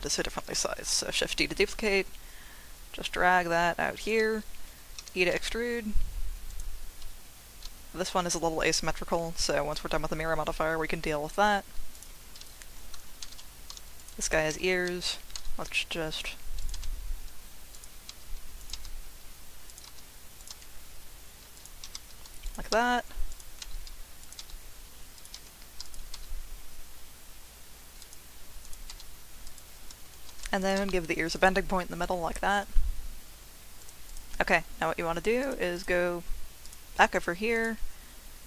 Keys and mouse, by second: 0.9 shift+d, 4.0 click, 5.0 e, 6.5 click, 13.2 shift+d, 14.0 click, 14.5 r, 15.0 click, 15.3 s, 16.6 click, 17.7 click, 18.1 r, 18.6 click, 19.7 click, 19.7 g, 19.9 r, 20.4 click, 20.5 g, 21.5 click, 21.8-26.1 typing, 22.4 click, 23.3 click, 24.2 click, 25.1 click, 28.0 click, 28.9 g, 29.4 click, 30.3 ctrl+r, 31.3 click, 33.8 click, 35.4 click, 35.8 click, 37.5-38.4 drag.